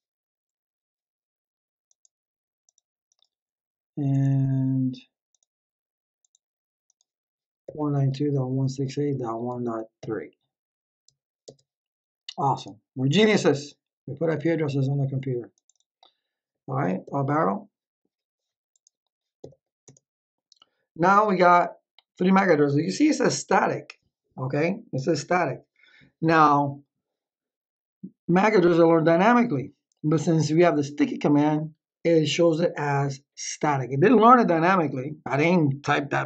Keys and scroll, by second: 7.3-10.4 typing, 11.4 Tab, 17.0 Up, 19.3 Up, 19.8 Return.